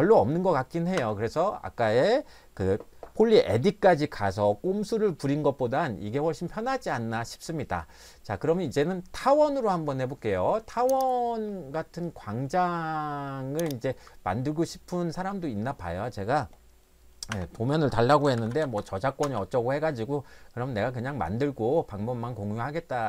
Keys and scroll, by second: 1.0 Escape, 17.3 Escape, 18.0-19.2 typing.